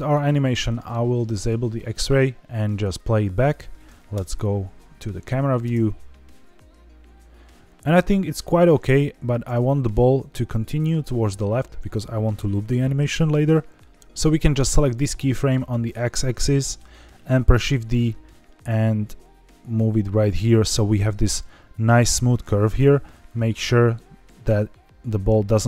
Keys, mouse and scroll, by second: 0.4 scroll up 2, 1.3 click, 1.8 middle click, 2.1-2.9 scroll down 3, 3.1 drag, 4.1 KP_0, 4.9 scroll down 2, 5.6 space, 8.9 click, 9.4 space, 9.9 scroll down 2, 13.4-14.0 drag, 14.0 space, 14.8 click, 15.2 shift+middle click, 15.6-16.2 scroll down 6, 16.5 shift+middle click, 17.4 shift+d, 20.1 click, 21.1 shift+middle click, 21.4-22.2 scroll up 3, 22.2 click, 23.3 click.